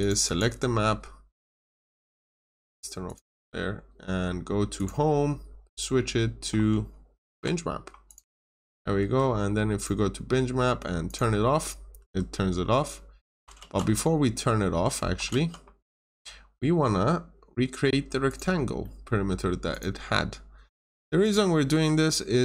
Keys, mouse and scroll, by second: 0.2 double click, 1.3 click, 7.2 b, 8.0 click, 8.9 Escape, 9.7 click, 11.9 Escape, 12.3-13.3 scroll down 1, 13.5 ctrl+z, 15.2 ctrl+z, 15.9 ctrl+z, 18.2 click, 18.7 middle click, 19.6 click, 21.6 Escape.